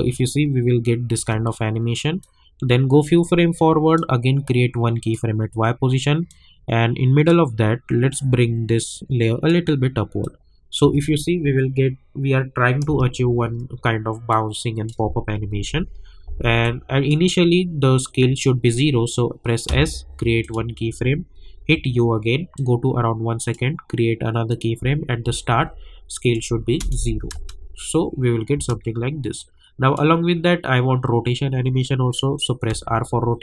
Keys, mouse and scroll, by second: 2.2-10.8 drag, 10.8 space, 12.9 space, 14.3 click, 15.5 =, 16.6-19.4 drag, 19.6 s, 20.4 click, 21.6 u, 22.5-24.5 drag, 24.8 j, 25.2 j, 26.2 click, 26.8 Return, 27.3 space, 29.4-32.2 drag, 32.7 r.